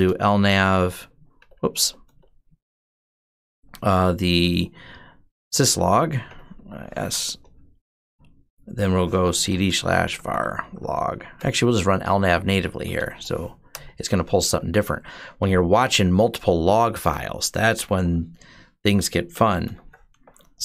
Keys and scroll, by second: 0.0-3.0 typing, 5.3-6.9 typing, 5.5 Tab, 7.1 Return, 8.7-14.2 typing, 14.4 Down, 18.9-20.6 typing.